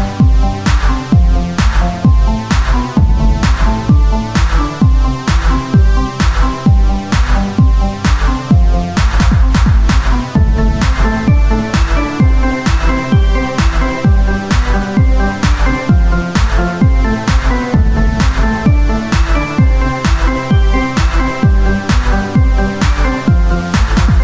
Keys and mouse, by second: 2.0-3.9 drag, 3.9 s, 7.7 s, 8.8 Tab, 9.6 o, 10.2 Tab, 10.8 ctrl+a, 11.2 Tab, 12.2 click, 12.6 z, 14.1 i, 20.0 w, 22.3 Tab, 22.7 KP_1, 24.1 click.